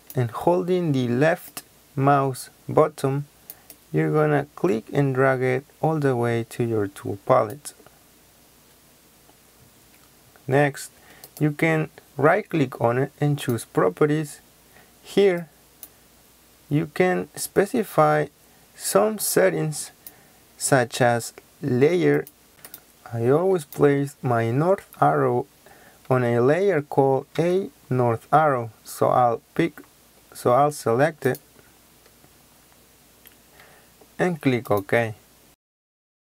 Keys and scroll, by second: 27.3 a, 35.4 ctrl+z.